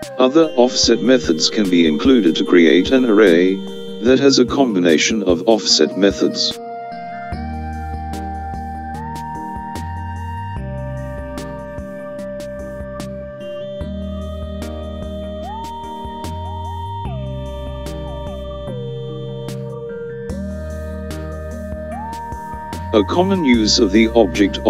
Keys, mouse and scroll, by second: 7.8 click, 12.4 click, 14.9-18.0 middle drag, 21.1 KP_5, 21.7 KP_7.